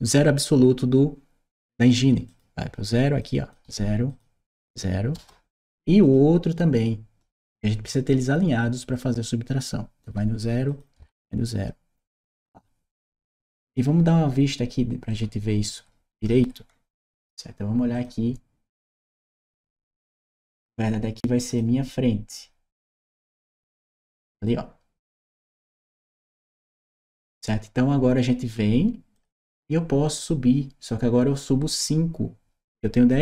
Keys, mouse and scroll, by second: 2.1 click, 3.0 click, 3.9 click, 5.0 Return, 5.9 click, 7.9 click, 10.5 click, 12.0 Return, 13.2 right click, 14.9-16.9 right drag, 15.5 w, 16.0 d, 16.9 w, 17.7 click, 18.8 click, 19.6 right click, 21.3 click, 23.2 click, 23.7-26.2 right drag, 26.8 right click, 29.0 click.